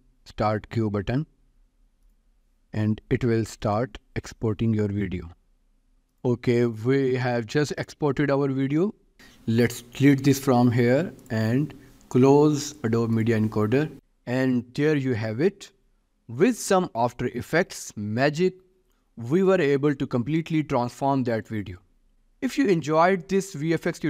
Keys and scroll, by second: 10.4 Delete.